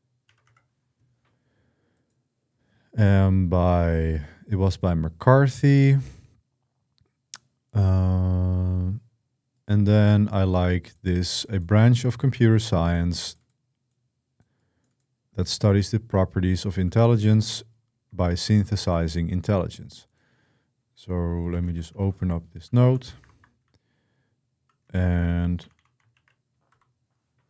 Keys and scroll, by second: 0.0-0.8 typing, 17.1 shift+g, 18.1 BackSpace, 18.6 Escape, 21.3 Escape, 21.5-26.5 typing, 23.1 ctrl+Return.